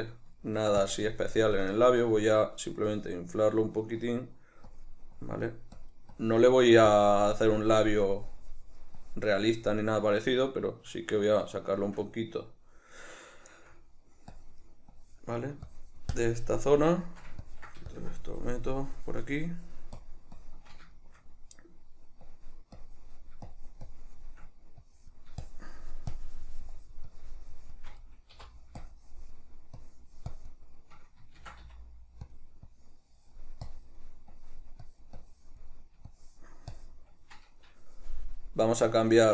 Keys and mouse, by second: 0.5 shift+middle click, 1.0 shift+click, 1.9-3.0 shift+middle drag, 3.0-10.8 drag, 10.8-14.5 shift+middle drag, 14.5-21.1 drag, 21.1-22.4 shift+middle drag, 22.4-32.5 drag, 31.5 shift+c, 32.8-39.3 drag.